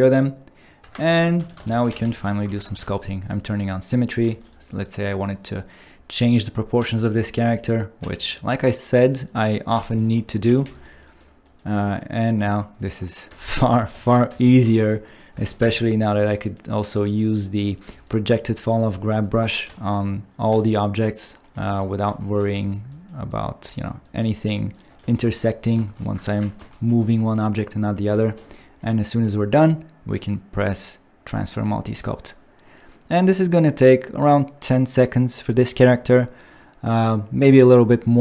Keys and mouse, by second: 0.8 `, 1.4 2, 1.7 shift+t, 1.9 f, 2.2 click, 2.6 ctrl+shift+x, 4.2 f, 4.4 click, 4.7 click, 5.2 click, 5.8 click, 6.2 click, 6.8 f, 7.0 click, 7.3 click, 8.0 f, 8.2 click, 9.3 click, 9.7 f, 9.9 click, 10.5 2, 10.6 f, 10.7 click, 11.1 click, 13.3 shift+click, 14.0 shift+click, 15.4 shift+t, 15.6 f, 15.8 click, 16.1 click, 16.5 click, 16.9 click, 17.3 click, 17.8 f, 17.9 click, 18.4 click, 19.2 click, 20.5 f, 20.6 click, 21.0 click, 21.7 `, 22.5 f, 22.6 click, 23.7 f, 23.7 click, 24.0 click, 24.4 click, 24.8 click, 25.5 middle click, 26.2 ctrl+Tab, 26.7 shift+middle click, 27.8 middle click, 31.5-38.2 drag.